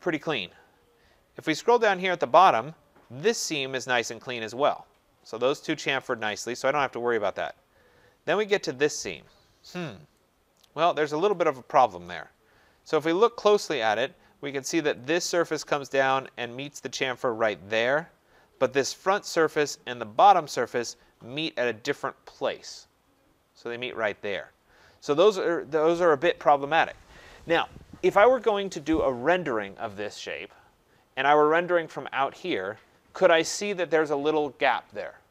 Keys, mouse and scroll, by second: 1.1-1.5 scroll, 1.9 scroll, 6.3-7.1 scroll, 7.2-8.0 scroll, 11.3 right click, 12.0-12.6 scroll, 12.6 scroll, 14.9 middle click, 15.0 scroll, 15.0 click, 15.2 middle click, 16.2 click, 19.1 click, 20.3 click, 30.7-31.9 scroll, 32.5 click.